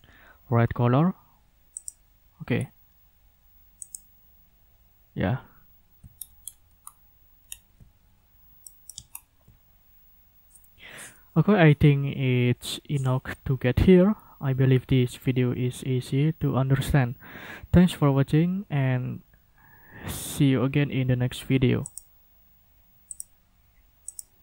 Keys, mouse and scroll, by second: 0.6 scroll down 2, 1.8 click, 2.5-2.9 scroll up 1, 3.8 click, 6.1-6.6 ctrl+scroll up 3, 6.8 ctrl+scroll down 2, 7.4 ctrl+scroll down 1, 8.6 middle click, 8.9 ctrl+click, 9.1 ctrl+scroll down 2, 21.8 click, 23.1 click, 24.0 click.